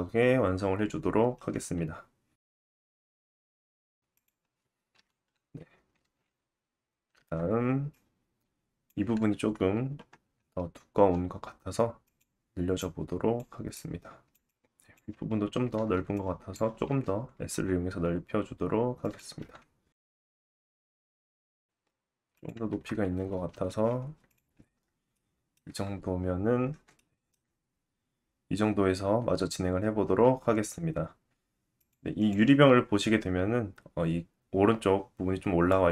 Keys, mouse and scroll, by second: 0.4 s, 1.7 Tab, 2.4 middle click, 4.1 click, 4.6 KP_1, 5.3 alt+z, 6.1 Tab, 6.6-9.4 drag, 8.6 s, 9.8 click, 11.1 g, 11.6 click, 12.5 click, 13.1 s, 14.0 Tab, 14.5 alt+z, 14.8 click, 15.4 Tab, 15.7-17.7 drag, 16.6 alt+z, 17.7 s, 18.8-20.8 drag, 19.0 Tab, 19.3 alt+z, 23.4 Tab, 24.3 alt+z, 24.9-26.8 drag, 25.5 g, 27.0 Tab, 27.5 alt+z, 28.0 click, 28.6 shift+middle click, 29.5-29.8 scroll up 2, 29.8 shift+middle click, 30.7-31.6 drag, 31.8 click, 32.2 click, 33.4-35.9 drag.